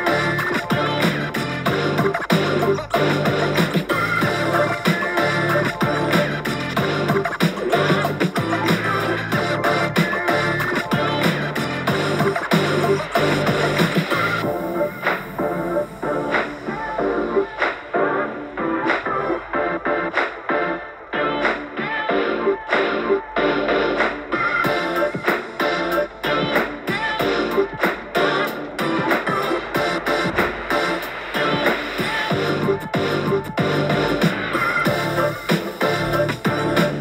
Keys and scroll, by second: 9.7 super+t, 13.0 super+r, 14.6 u, 15.5 shift+u, 15.6 shift+u, 15.9 shift+u, 18.8 scroll down 3, 19.1 Page_Down, 19.2 Page_Down, 20.1-20.5 Page_Down, 20.5 Page_Down, 21.0 Page_Down, 22.4 BackSpace, 22.8 super+r, 29.3-32.0 typing, 32.0 super+t, 34.5-34.9 scroll down 4, 34.9 scroll up 1, 35.4 Return, 35.7 super+t.